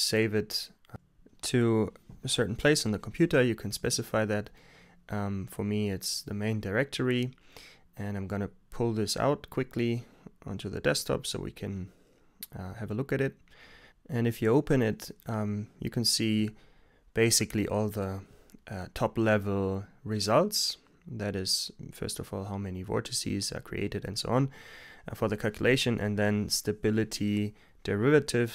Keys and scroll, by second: 0.1 Return, 3.6 super+t, 9.6-12.6 typing.